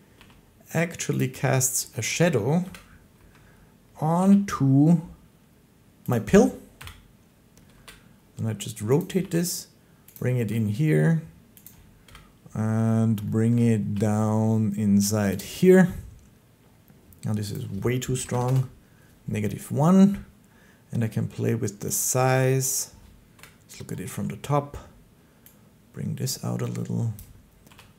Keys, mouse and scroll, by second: 0.0 g, 1.1 click, 1.9 shift+middle click, 2.5 1, 6.0 click, 6.6 7, 7.6 r, 8.9 click, 9.1 g, 10.0 click, 10.3 r, 11.5 click, 11.9 1, 13.4 shift+middle click, 13.7 g, 15.2 click, 17.4 click, 18.1 typing, 18.3 Return, 22.5 click, 23.2 7, 27.0 click, 27.5 g.